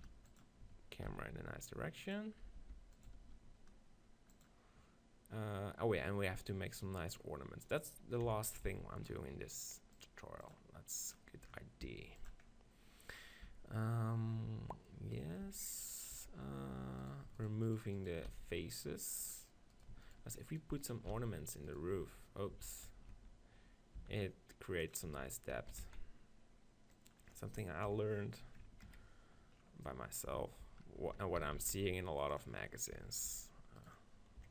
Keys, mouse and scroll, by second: 0.0 shift+i, 0.0 shift+f, 0.4-4.7 drag, 1.1 shift+f, 2.6 g, 3.3 shift+f, 8.2 KP_7, 8.7 z, 9.0-10.4 middle drag, 10.4-11.9 drag, 11.9 middle click, 11.9 g, 12.3-14.2 drag, 13.5 Tab, 14.2 middle click, 15.5 Tab, 16.2 Tab, 17.1-21.1 right drag, 18.3 x, 21.1-23.6 drag, 21.1 shift+x, 22.0 z, 22.7 ctrl+z, 24.0 x, 25.1 Tab, 25.6 s, 27.1 click, 27.9 KP_7, 29.6-31.4 middle drag, 30.3 Tab, 31.0 Tab, 31.4 s, 32.4-34.5 drag, 33.0 Tab, 33.8 right click.